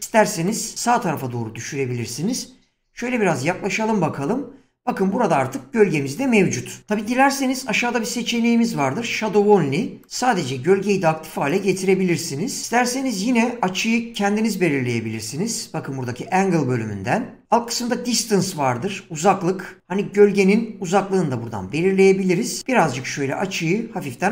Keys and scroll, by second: 2.8 <, 2.9 <.